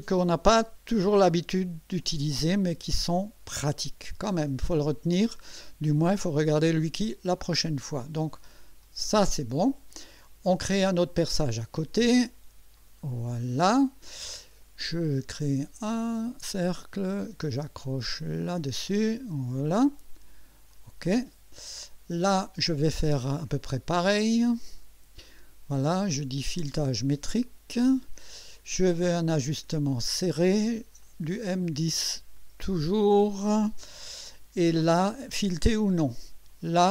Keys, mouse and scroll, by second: 2.0 click, 3.1-4.7 drag, 8.8 click, 10.0-10.9 drag, 11.3 click, 12.7 click, 15.9 click, 18.4 click, 19.4 click, 20.7 click, 21.6-22.4 drag, 24.6 click, 26.7 click, 27.7 click, 29.3 click, 30.1 click, 31.0 click, 32.3 click, 33.4 click, 35.7 click, 36.5 click.